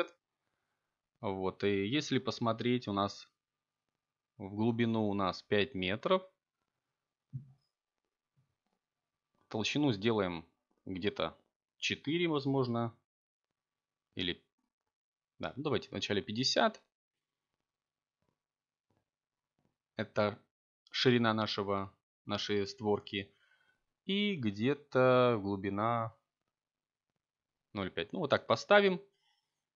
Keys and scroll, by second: 9.7 0, 10.7 ., 11.4 9, 11.8 Return, 14.9 0, 16.0 ., 18.0 0, 19.8 5, 20.3 Return.